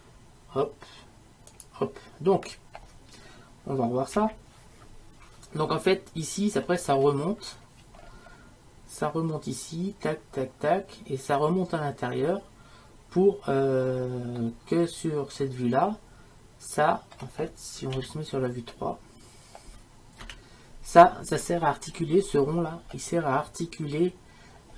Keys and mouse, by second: 0.0 middle click, 1.7-4.2 middle drag, 4.2 KP_1, 14.6-16.2 middle drag, 17.0 middle click, 18.0 KP_3.